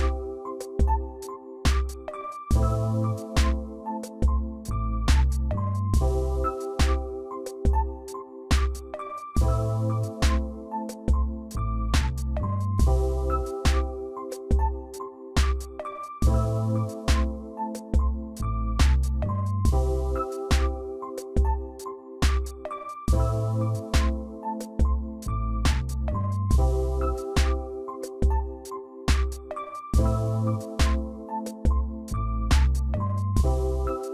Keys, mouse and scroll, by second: 2.1 ctrl+j, 3.1 ctrl+click, 4.0 ctrl+click, 6.6 ctrl+j, 7.4 ctrl+click, 8.4 ctrl+click, 15.4 ctrl+j, 18.4 ctrl+t, 19.4 shift+click, 25.1 click, 25.6 Left, 25.7 Left, 25.8 Left, 27.3 ctrl+j, 29.3 shift+click, 31.3 click, 31.6 click, 33.8 ctrl+j.